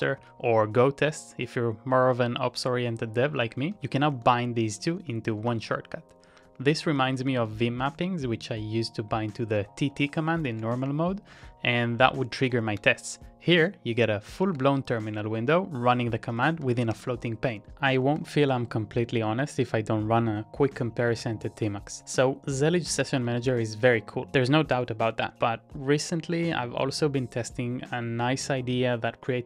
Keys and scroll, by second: 0.2 ctrl+c, 3.5-4.6 typing, 4.8 ctrl+a, 5.0 ctrl+a, 5.4 ctrl+a, 10.0 ctrl+a, 10.2 ctrl+a, 10.5 ctrl+c, 11.3 ctrl+d, 12.7 ctrl+d, 14.4 ctrl+x, 14.9 typing, 16.1-18.4 typing, 18.0 ctrl+a, 23.0 ctrl+a, 23.3 shift+k, 26.4 Up, 26.8 Up, 27.1 Up, 27.3 Up, 27.5 Up, 27.7 Up, 28.1 Down, 28.5 Down, 28.7 Down, 29.1 Down.